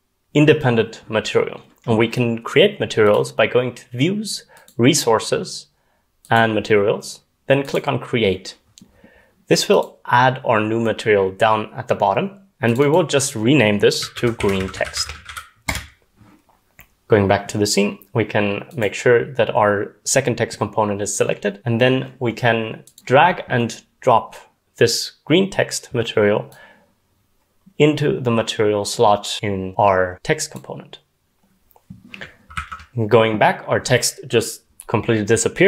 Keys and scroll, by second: 13.9-15.8 typing, 32.5 ctrl+s.